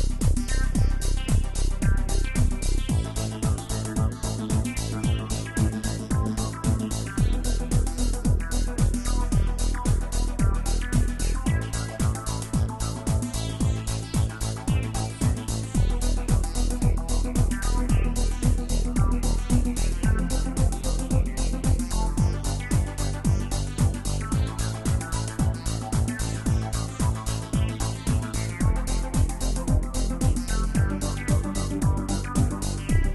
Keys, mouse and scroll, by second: 3.4 space, 4.0-5.7 drag, 5.7-9.1 middle drag, 9.1 KP_1, 11.3 g, 16.2 space, 19.3 space, 19.9-21.3 middle drag, 21.3 space, 25.9 space, 26.1-29.1 middle drag, 30.5 scroll down 3, 31.0-33.1 middle drag.